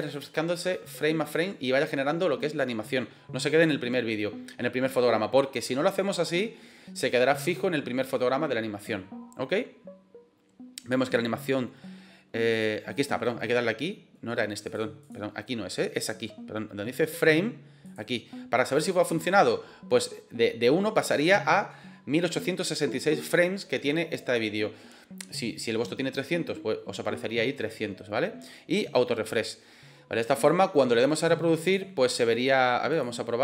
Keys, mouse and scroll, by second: 12.4 click, 14.5 click, 15.8 click, 17.7 click, 31.5-32.4 drag, 32.8-33.4 drag.